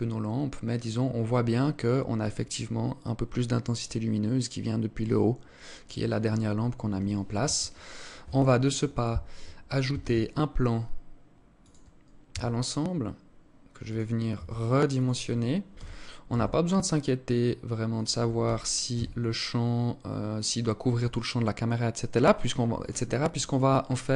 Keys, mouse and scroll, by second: 6.9 Escape, 9.4 shift+a, 11.8 s, 13.8 s, 15.2 g, 18.0 g.